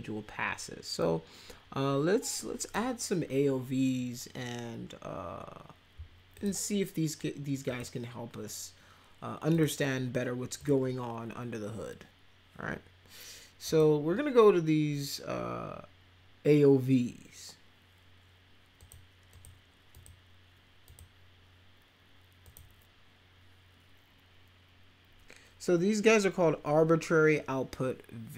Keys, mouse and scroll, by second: 1.0-2.7 drag, 6.3 click, 7.7 click, 9.5 click, 10.6 click, 13.7 click, 18.8 click, 19.3 click, 19.9 click, 20.9 click, 22.4 click.